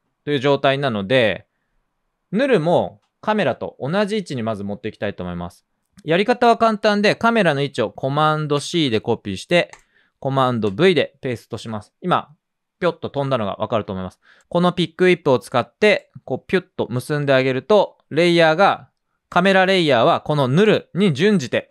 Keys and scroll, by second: 8.5 super+c, 10.6 super+v.